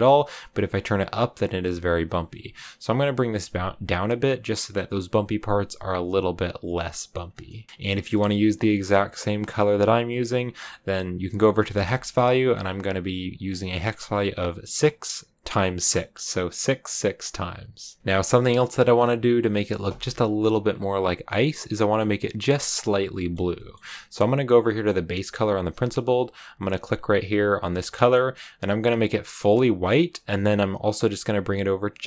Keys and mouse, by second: 8.7 click, 18.0 KP_0, 18.3 click, 19.8 click, 21.0 click, 21.6 middle click, 23.0 middle click, 23.5 middle click, 23.6 click, 24.6 middle click.